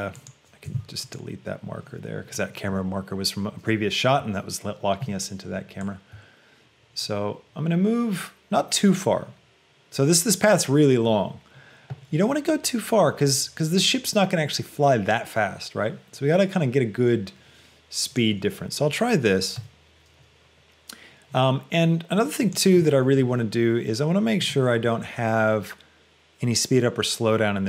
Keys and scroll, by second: 0.9 ctrl+x.